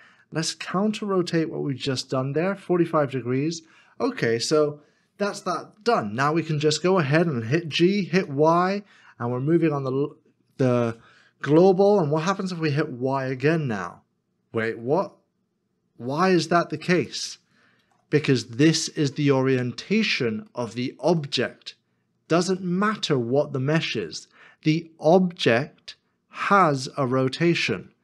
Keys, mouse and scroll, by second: 1.7 typing, 6.5-7.3 scroll down 1, 7.7 g, 8.1 y, 13.2 y, 17.9 ctrl+z, 19.9 scroll up 1, 20.7 shift+middle click, 21.9 scroll down 1, 22.6 middle click.